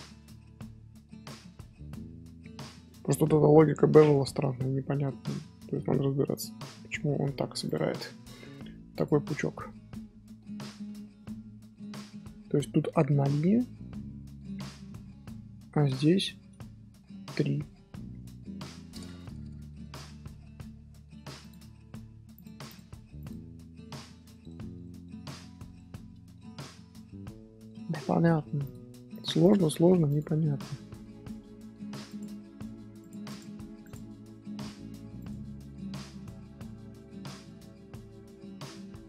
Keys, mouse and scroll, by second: 0.5-1.6 shift+middle drag, 1.6 Tab, 1.9-3.2 middle drag, 3.2 Tab, 4.3-7.3 middle drag, 7.6 click, 7.7 scroll up 1, 8.9 click, 9.4 scroll down 1, 9.6-10.8 middle drag, 10.8 scroll down 1, 11.1-12.5 middle drag, 12.5-13.6 scroll up 2, 15.3 middle click, 15.6 scroll up 2, 15.9 shift+middle click, 16.6 scroll down 2, 16.8-18.8 middle drag, 18.8 scroll up 3, 19.2-19.6 scroll down 1, 19.6 shift+middle click, 20.4-20.9 scroll up 1, 21.4 click, 22.6 click, 23.4-23.7 scroll down 1, 23.7-24.2 scroll up 1, 24.2 scroll down 1, 24.3-27.2 middle drag, 27.2 scroll up 1, 27.4-28.0 scroll down 1, 28.0 scroll up 1, 28.1 scroll down 1, 28.6 click, 29.4 click, 30.4 middle click, 31.2 scroll up 1, 31.2 scroll down 1, 31.5 scroll up 1, 32.0 click, 33.2 click, 36.0 middle drag, 36.3 Tab, 37.2-37.6 middle drag, 37.6 z, 37.9 scroll down 1, 37.9-39.0 middle drag.